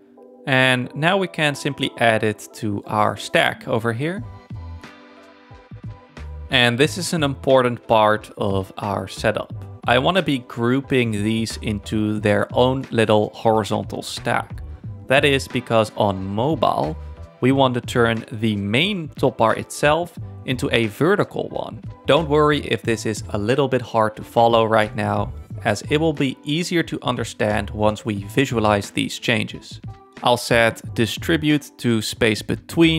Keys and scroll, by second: 0.9-1.8 typing, 2.1 super+-.